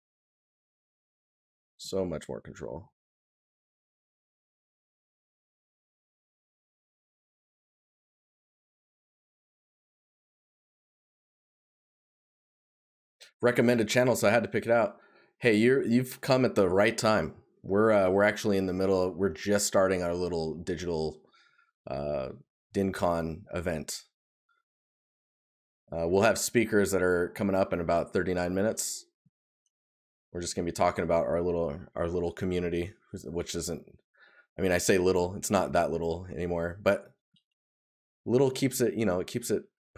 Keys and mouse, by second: 2.4 right click, 3.9 right click, 18.7 right click, 25.1 right click, 29.2 right click.